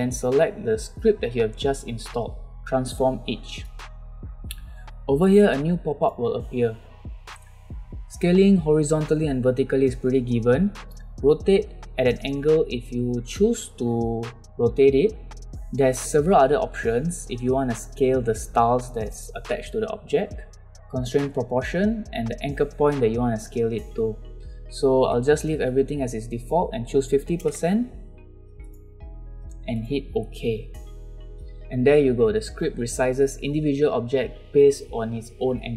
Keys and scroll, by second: 27.4 5, 27.5 0.